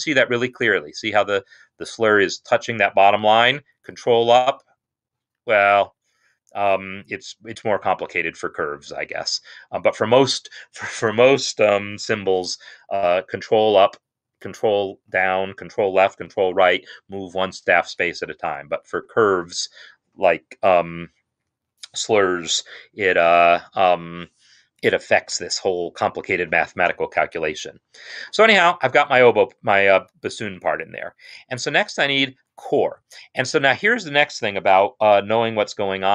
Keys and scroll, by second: 3.7 ctrl+Up, 6.0 ctrl+Down, 7.3 ctrl+Up, 7.9 ctrl+Up, 9.3 ctrl+Down, 9.7 ctrl+Down, 18.5 ctrl+Down, 27.8 Escape.